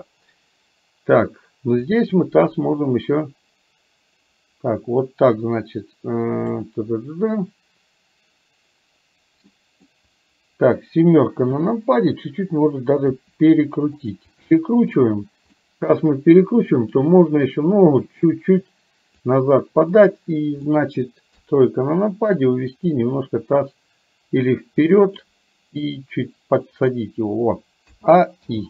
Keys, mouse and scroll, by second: 1.8 click, 2.3-6.6 drag, 9.6 middle click, 11.5 KP_7, 13.1 r, 14.4 middle click, 15.6 middle click, 16.9 click, 18.0-19.4 drag, 20.0 click, 20.8 middle click, 21.4 KP_3, 22.6-25.3 drag, 25.9 click, 26.3-27.9 drag, 27.9 a, 28.5 i.